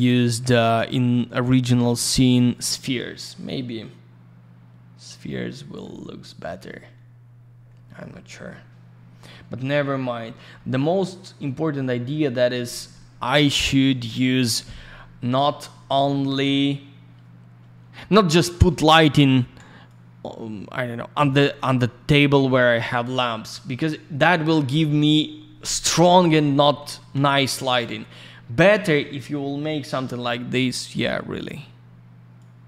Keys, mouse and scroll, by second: 2.2 click, 9.7-10.5 scroll up 2, 10.5 middle click, 18.5 click, 18.6 middle click, 19.8 click, 21.7 click, 22.5 middle click, 26.8 ctrl+a, 32.3 click.